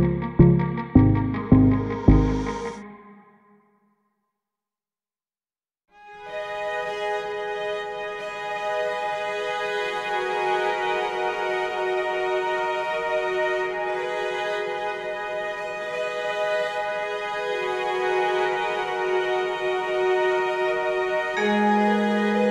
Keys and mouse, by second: 1.2 click, 1.6 click, 2.9 click, 3.4 shift+middle click, 5.8 ctrl+KP_Subtract, 7.6 ctrl+x, 9.8 click, 11.1 click, 11.6 click, 12.9 click, 13.1 click, 14.1 shift+click, 16.1 shift+click, 17.5 shift+click, 17.7 shift+click, 19.1 shift+click, 19.3 shift+click, 22.4 click.